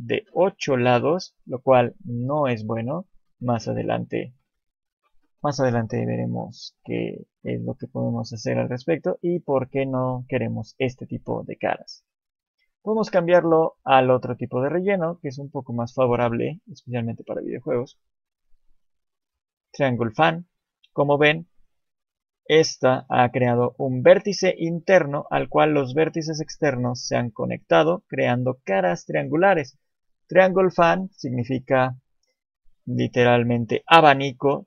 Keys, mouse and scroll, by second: 13.2 click, 18.5 click.